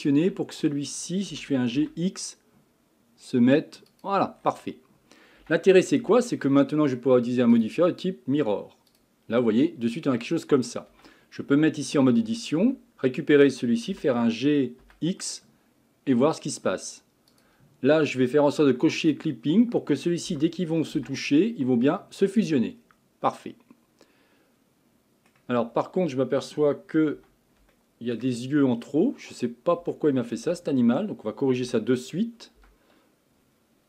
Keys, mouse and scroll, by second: 0.0-0.5 shift+middle drag, 0.5 scroll up 2, 1.3 g, 4.4-5.4 scroll down 6, 5.4 Tab, 6.0 Tab, 7.5-10.4 drag, 10.4 middle click, 10.9 Tab, 11.4 scroll up 2, 12.2 a, 12.6 a, 13.9 g, 19.0 click, 20.3 g, 22.8-23.3 scroll down 1, 23.3-25.6 middle drag, 25.6 scroll up 4, 27.1 Tab, 27.7-28.7 shift+middle drag, 28.7-29.1 scroll down 1, 29.1 scroll up 1, 29.9 shift+middle click, 30.5 Tab, 31.6 a, 32.6 l.